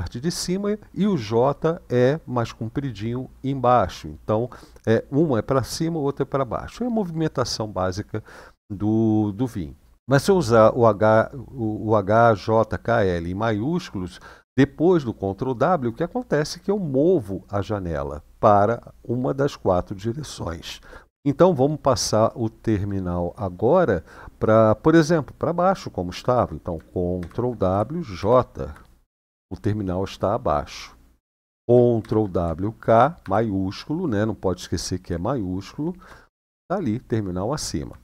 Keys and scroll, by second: 27.0 ctrl+w, 27.9 shift+j, 31.8 ctrl+w, 32.9 shift+k.